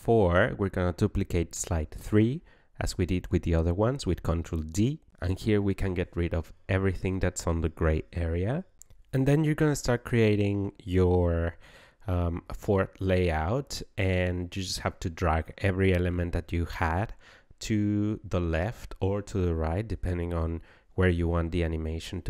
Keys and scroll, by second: 3.3 ctrl+d, 6.4 BackSpace.